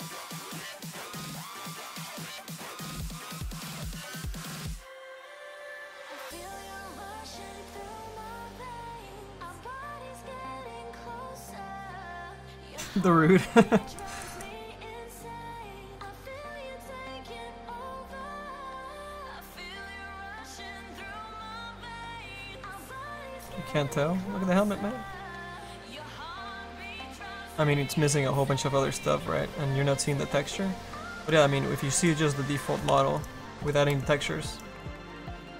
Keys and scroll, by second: 32.9 y, 34.1 space, 34.5 space, 35.1 space.